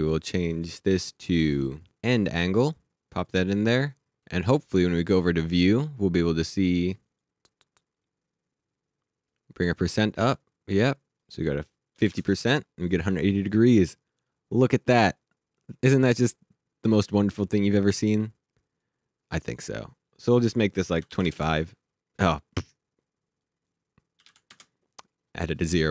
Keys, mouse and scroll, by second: 2.4 click, 2.9 click, 5.6 click, 9.3 click, 11.9 KP_5, 12.1 KP_Enter, 15.6 click, 20.9 KP_2, 21.1 KP_5, 21.3 KP_Enter, 23.4 click, 24.2 KP_2, 24.5 KP_Enter.